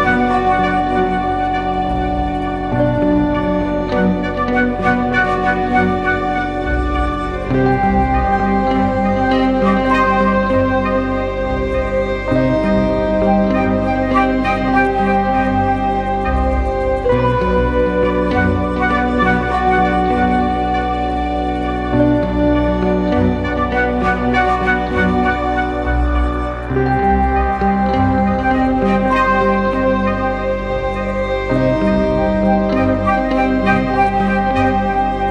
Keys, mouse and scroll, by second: 0.0 space, 2.0-3.4 scroll down 1, 4.2 alt+click, 7.9 double click, 11.3 typing, 11.9 double click, 13.3 typing, 14.0 double click, 20.3-23.1 typing, 22.6 double click, 24.3 typing, 26.6 double click, 28.1 ctrl+-, 28.2 ctrl+-, 33.4 alt+scroll up 1, 34.7-35.3 scroll up 1.